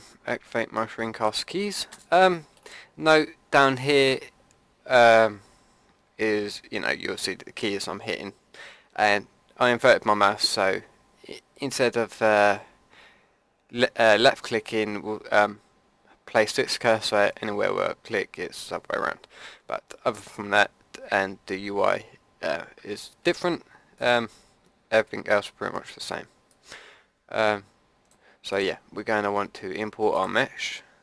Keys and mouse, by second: 1.0-4.2 drag, 1.9 n, 23.9-27.1 drag, 28.5-30.4 drag.